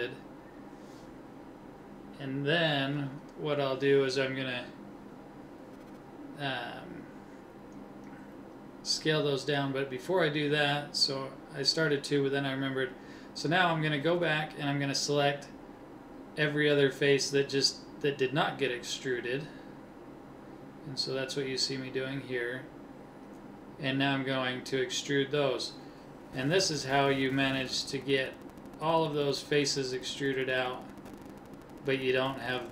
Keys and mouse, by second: 3.5 click, 4.4-6.1 drag, 6.1 s, 13.1 a, 13.8-16.3 right drag, 25.2 e.